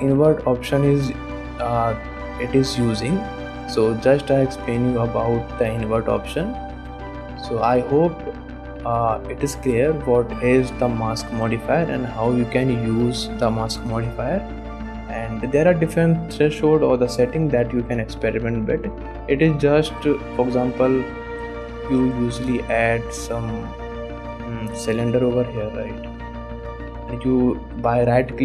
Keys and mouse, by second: 3.4 click, 3.8 shift+middle click, 7.8 click, 10.6 click, 11.0 shift+click, 13.8 shift+middle click, 14.9 middle click, 17.7 click, 18.2 click, 18.7 middle click, 19.1 shift+middle click, 19.6 click, 19.9 shift+drag, 20.6 ctrl+s, 20.9 ctrl+Tab, 21.6 shift+click, 22.1 shift+a, 25.0 g, 26.7 g, 27.9-28.4 drag.